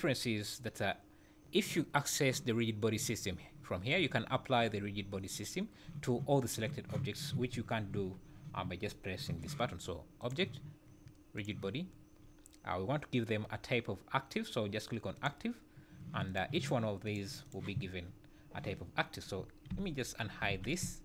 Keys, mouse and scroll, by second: 10.2 click, 16.3 click, 17.0 click, 17.4 click, 19.7 alt+h, 20.5 alt+a, 20.8 `.